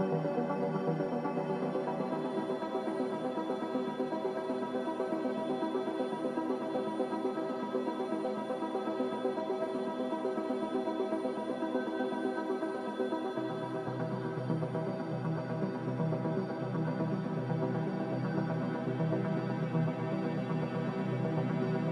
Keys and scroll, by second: 1.0 x, 1.1 z, 2.8 Return, 6.5 z, 8.5 typing, 8.9 Return, 14.7 ctrl+z, 18.1 a.